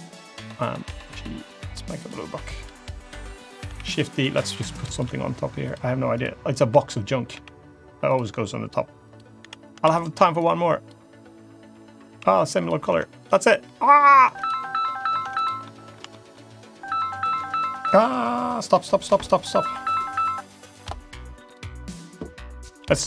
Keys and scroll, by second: 0.7 g, 3.6 shift+d, 4.0 s, 4.9 e, 6.4 l, 7.2 g, 9.2 l, 9.7 shift+d, 12.0 g, 12.8 Tab, 14.1 Tab, 15.1 Tab.